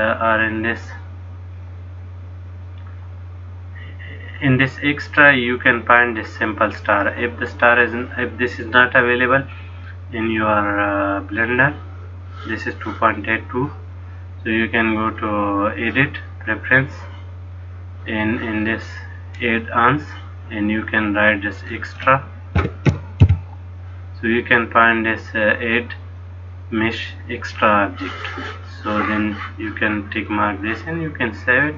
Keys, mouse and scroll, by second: 15.1 click.